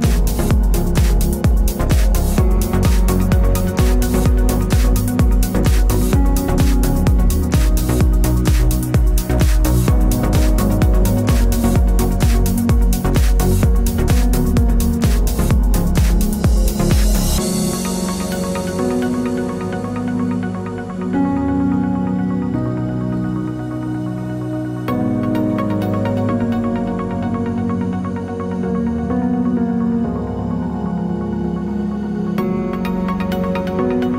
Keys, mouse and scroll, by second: 1.1 ctrl+t, 1.7 click, 5.5 KP_Enter, 7.9 click, 8.6 KP_3, 8.7 KP_Enter, 10.9 ctrl+click, 11.7 ctrl+t, 12.3 click, 14.5 KP_Enter, 16.9 shift+Num_Lock, 17.1 shift+click, 17.5 ctrl+g, 18.3 click, 18.9-21.1 typing, 22.1 click, 22.9 g, 23.5 click, 24.3-25.3 typing, 26.1 click, 27.3 ctrl+a, 27.7 click, 28.3 ctrl+d, 30.1 ctrl+=, 30.4 ctrl+=, 31.1 space, 31.2 click, 31.5 space, 32.3 u, 33.9 click.